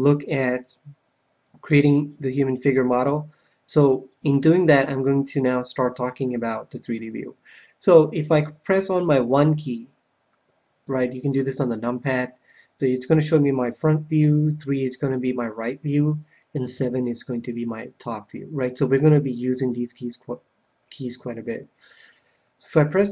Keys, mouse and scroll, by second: 5.0 KP_1, 5.9-8.0 middle drag, 10.8 KP_1, 14.2 KP_3, 16.7 KP_7.